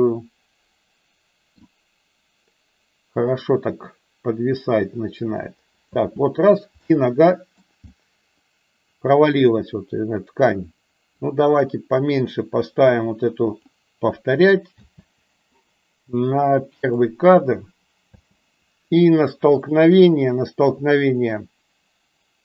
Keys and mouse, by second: 0.0-2.1 middle drag, 6.0 space, 6.7-7.5 middle drag, 7.9-9.4 middle drag, 11.4-13.6 drag, 14.6 space, 17.1 click, 18.4 space.